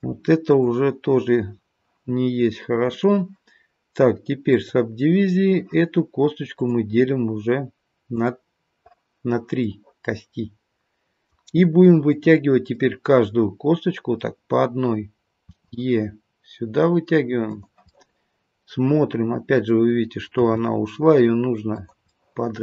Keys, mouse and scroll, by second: 0.4 click, 2.8 click, 6.6 click, 8.1 click, 9.6 middle click, 12.0 click, 12.7 middle click, 15.4 e, 17.9 middle click, 20.4 g, 22.1 middle click.